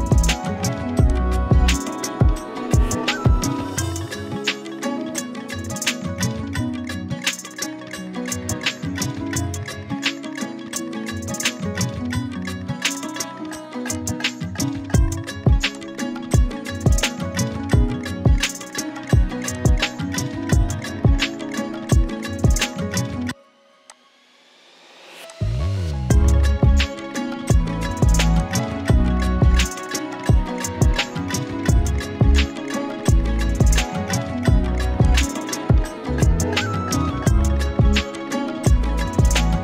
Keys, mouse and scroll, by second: 1.1-7.7 shift+click, 2.1 shift+space, 8.7 right click, 11.1 right click, 12.9 click, 13.3 z, 13.5 click, 13.7 space, 13.9 click, 15.8 click, 17.7-18.7 shift+drag, 19.6-22.3 alt+drag, 27.1 ctrl+z, 28.2 z, 28.3 click, 28.7 z, 28.8 z, 29.7 right click, 32.3 click, 35.0 click.